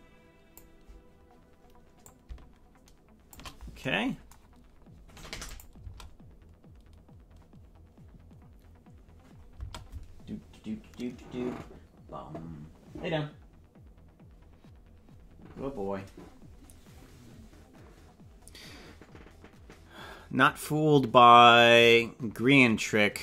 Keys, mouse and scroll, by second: 2.0-3.4 shift+drag, 5.4 click, 5.8 space, 9.5 space.